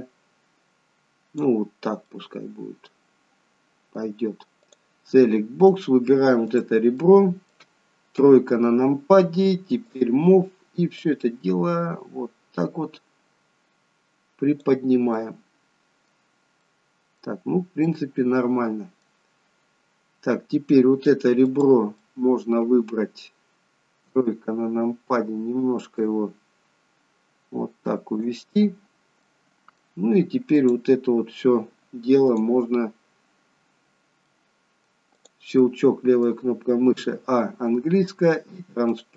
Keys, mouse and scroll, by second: 2.4 middle click, 4.7 click, 5.1 middle click, 6.5 click, 7.0 middle click, 8.1 KP_3, 9.8 click, 11.0 click, 15.1 middle click, 16.7 middle click, 17.4-17.9 scroll up 2, 17.9 middle click, 19.3 scroll down 2, 20.7 middle click, 21.5 click, 22.0 middle click, 24.1 KP_3, 25.9 click, 29.2 middle click, 30.6 click, 34.2 middle click, 35.2 click, 35.6 middle click, 37.0 a, 39.0 click.